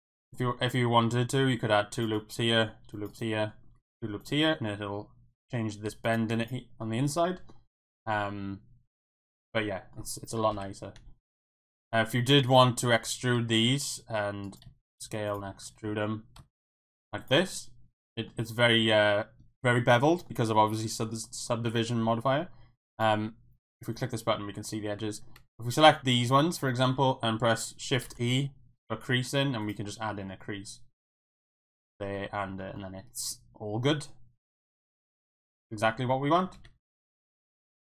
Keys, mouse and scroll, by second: 0.5 middle click, 1.0 middle click, 1.4 ctrl+r, 2.9 ctrl+r, 3.1 click, 3.4 middle click, 3.7 ctrl+r, 5.8 middle click, 6.3 Tab, 6.8-7.5 middle drag, 7.8 middle drag, 8.1-9.9 middle drag, 10.5 KP_1, 11.0 Tab, 11.6 shift+middle click, 12.5 alt+click, 13.4 e, 14.4 right click, 14.7 s, 15.3 click, 15.4 e, 15.8 z, 16.4 x, 16.9 click, 17.1 Tab, 17.5-18.3 middle drag, 19.9 middle click, 20.8 middle click, 22.0 Tab, 22.9 alt+click, 23.9 click, 25.5 alt+shift+click, 28.0 shift+e, 29.6 click, 29.8 Tab, 30.3 middle click, 31.3-32.0 middle drag, 32.1-32.6 middle drag, 32.7-35.0 middle drag, 35.5 middle click.